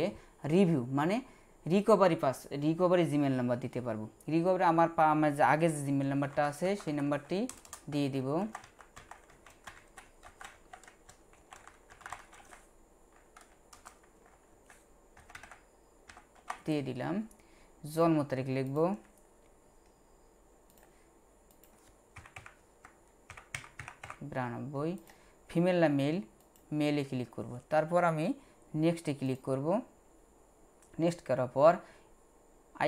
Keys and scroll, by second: 6.1-12.4 typing, 14.2-16.4 typing, 22.2-24.0 typing.